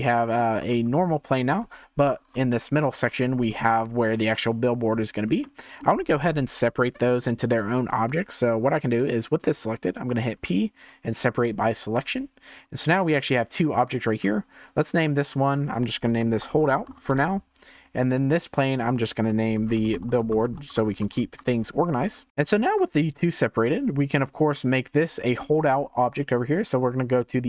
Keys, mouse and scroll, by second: 0.5 g, 2.2 KP_0, 2.8 scroll up 1, 3.1 Tab, 3.5 click, 4.2-5.4 scroll up 3, 5.4-8.4 shift+middle drag, 10.4 p, 12.6 Tab, 13.9 click, 14.2-14.6 scroll down 4, 15.3 click, 15.5-18.2 drag, 20.1 l, 22.0-22.3 scroll up 4, 22.7 click, 23.6 scroll down 2, 24.1-24.9 shift+middle drag, 24.9 scroll up 2, 25.4-27.4 shift+middle drag, 27.4 click.